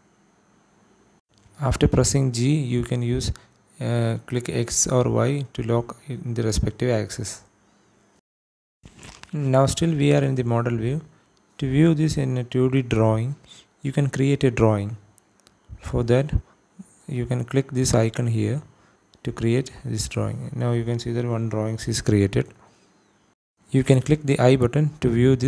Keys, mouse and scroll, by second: 0.1 click, 0.8 g, 1.2 y, 2.3 click, 3.5 click, 4.3 g, 6.4 y, 8.7 x, 9.2 click, 9.6 click, 10.5-10.8 scroll down 1, 11.0 shift+middle click, 19.1 click, 25.4 click.